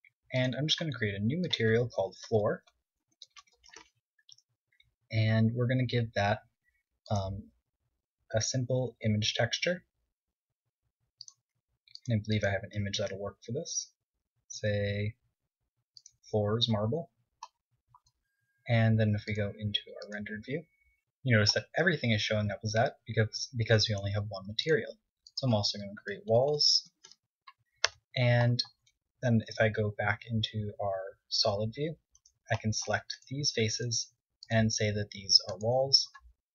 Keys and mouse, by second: 4.7 o, 10.1 drag, 13.3-15.4 drag, 18.7-20.4 middle drag, 21.6-22.4 drag, 23.0-24.9 middle drag, 25.4-29.0 drag, 27.8 l, 29.6 Tab, 30.3 x, 31.7 z, 32.2 z, 32.7 z, 33.3-35.5 drag.